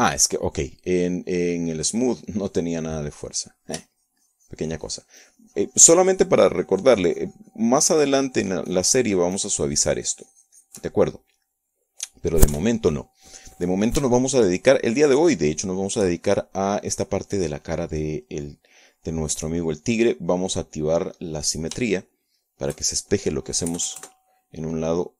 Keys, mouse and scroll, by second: 0.7 click, 3.9-5.1 drag, 5.6-12.5 shift+drag, 12.6 shift+click, 14.1 KP_1, 15.9-18.0 shift+drag, 21.8 click, 22.8 click, 23.6-24.9 shift+drag.